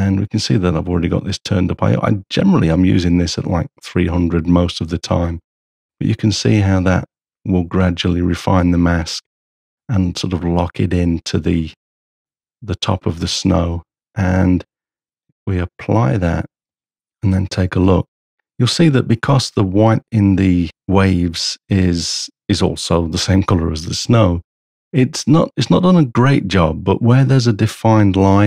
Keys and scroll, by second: 16.9 h.